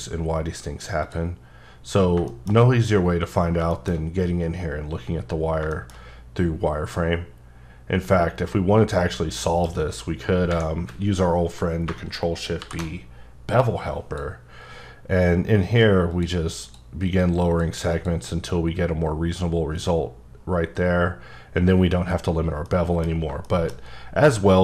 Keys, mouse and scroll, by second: 1.0 click, 2.3 shift+middle click, 3.3-3.7 scroll down 2, 3.7 shift+middle click, 4.7-5.3 scroll down 2, 5.3 scroll up 2, 5.7 shift+middle click, 6.0-6.8 shift+scroll up 4, 6.8-9.4 scroll down 4, 9.4 F9, 12.6 ctrl+shift+b, 13.6 click, 16.1 click, 16.6 click, 17.1 click, 17.5 click, 17.9 click, 20.4-20.9 scroll down 4, 22.1 scroll up 2, 22.7 middle click, 23.7 shift+scroll up 3.